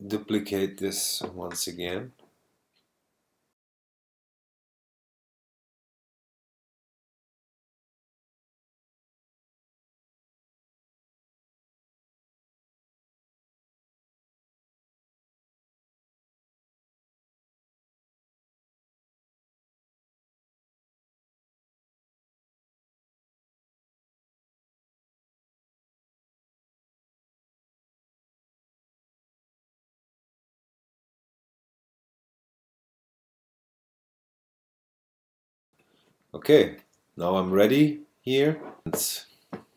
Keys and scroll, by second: 5.2 shift+s, 8.0 2, 8.7 4, 9.0 super+Return, 9.2 space, 11.4-12.6 typing, 14.5 i, 16.3 2, 17.3 Return, 17.6 space, 20.6 0, 20.9 4, 21.2 space, 22.5 super+space, 24.2 3, 24.6 0, 24.9 super+Return, 28.7 shift+s, 32.0-33.3 typing.